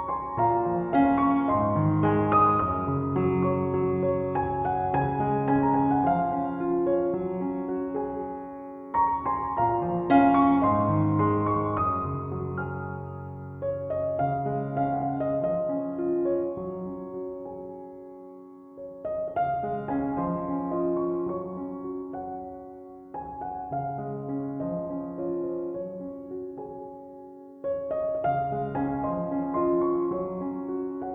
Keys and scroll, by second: 30.4 ctrl+z.